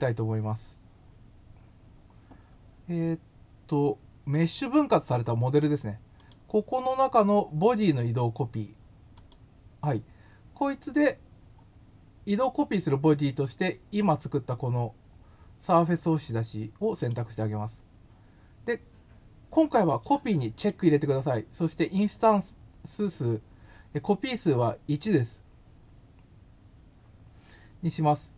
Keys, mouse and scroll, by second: 6.2 click, 9.1 click, 17.0 click, 20.5 click.